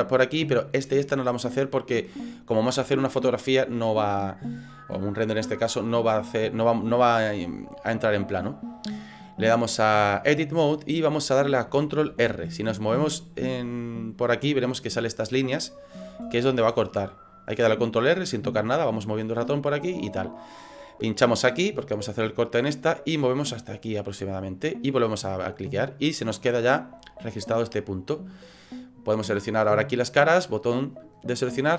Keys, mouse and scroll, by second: 9.2 click, 12.1 ctrl+r, 25.3 middle click, 28.1 middle click, 29.7 click, 30.5 right click.